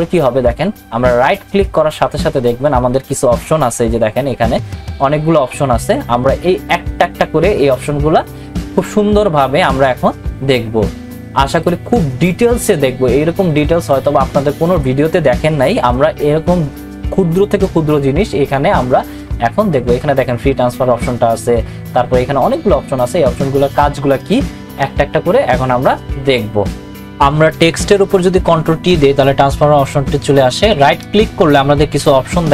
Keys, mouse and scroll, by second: 1.2 right click, 26.8 click, 28.6 click, 28.7 ctrl+t, 30.9 right click.